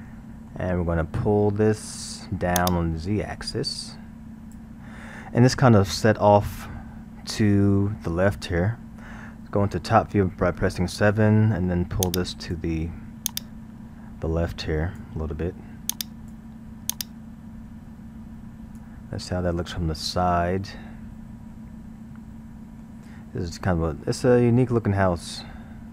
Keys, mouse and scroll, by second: 2.6-5.6 drag, 5.7-8.8 middle drag, 10.2 KP_7, 12.1-19.3 drag, 19.3-20.6 middle drag, 20.6 scroll, 21.5-25.9 middle drag.